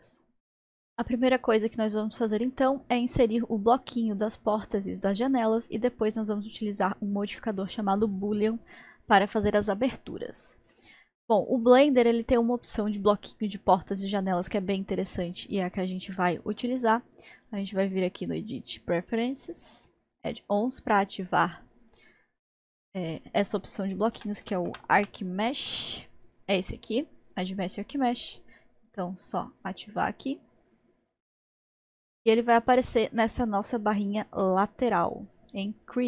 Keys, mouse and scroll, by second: 1.0-1.6 scroll down 1, 1.6 scroll down 1, 3.2-6.2 middle drag, 8.8 scroll up 1, 10.7-14.6 middle drag, 15.1-18.0 middle drag, 18.0-22.1 drag, 31.7-34.1 middle drag, 34.1-36.0 drag.